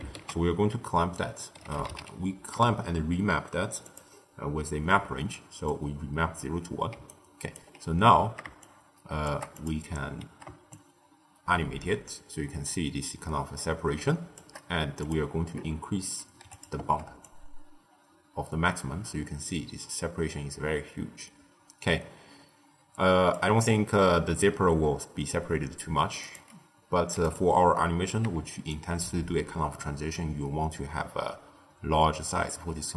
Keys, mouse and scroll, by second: 0.1 ctrl+a, 4.8-6.8 middle drag, 6.8 d, 7.0 right click, 7.5 d, 8.5-9.6 shift+drag, 10.6-13.6 shift+drag, 14.9-16.6 drag, 17.1-20.1 shift+drag, 26.1-27.3 drag, 28.6-31.6 shift+drag.